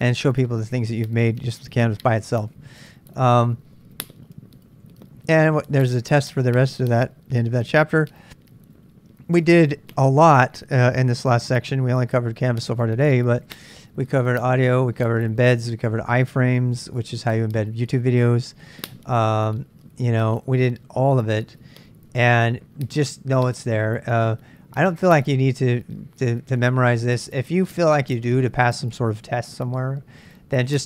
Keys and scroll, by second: 3.3 j.